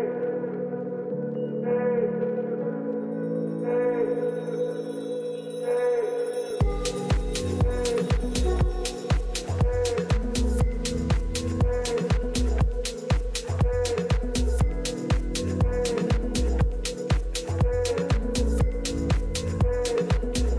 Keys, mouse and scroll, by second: 0.9 a, 1.6 a, 2.0 a, 2.3 a, 4.3 a, 4.6 a, 12.3-14.0 middle drag, 14.0-15.8 right drag, 15.3 KP_3, 16.4 middle click, 16.7 middle click, 18.8 a.